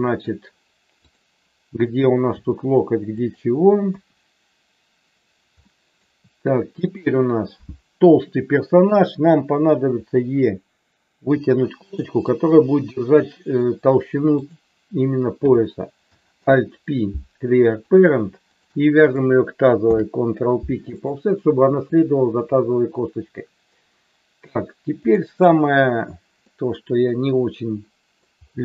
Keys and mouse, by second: 1.1 click, 2.2 g, 3.1 click, 3.8 KP_1, 5.6 shift+middle click, 6.8 click, 9.9 e, 11.8 click, 16.3 alt+p, 19.8 ctrl+p, 25.0 click, 26.5-28.1 middle drag.